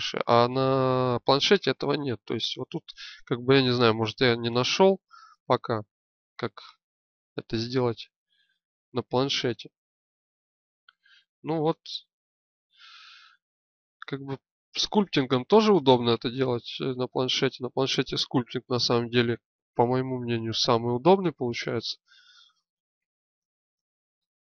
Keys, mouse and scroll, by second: 2.6-3.8 right drag, 3.4 click, 4.4-7.3 drag, 17.2 z, 18.7 z, 19.7-20.8 drag, 24.1 middle click.